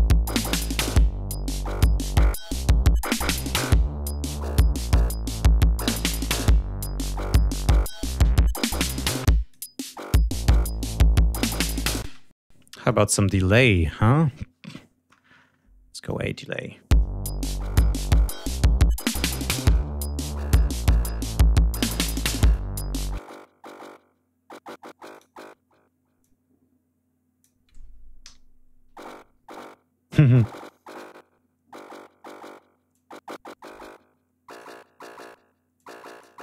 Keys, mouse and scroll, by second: 1.5 click, 2.7 scroll down 2, 3.5 click, 4.8 click, 5.2-6.0 scroll up 2, 6.5 click, 7.3-7.7 scroll down 1, 7.8 click, 9.0 click, 10.4 click, 11.5 click, 12.5 space, 12.8 click, 13.5 right click, 15.0-15.5 scroll up 2, 15.9 click, 16.9 space, 19.3 click, 20.5 click, 22.2 click, 23.1 click, 25.0 click, 26.1-27.5 drag, 28.1 l, 30.2 click, 32.8-34.7 drag, 35.7 click.